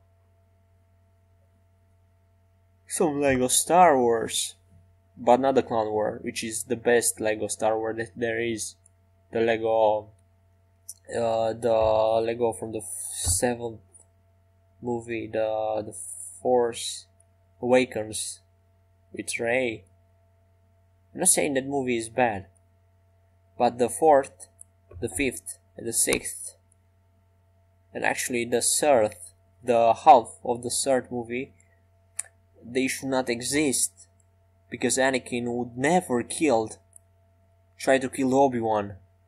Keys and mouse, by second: 20.7-22.7 right drag, 24.5-26.6 drag, 27.1-29.1 middle drag, 37.0 middle click.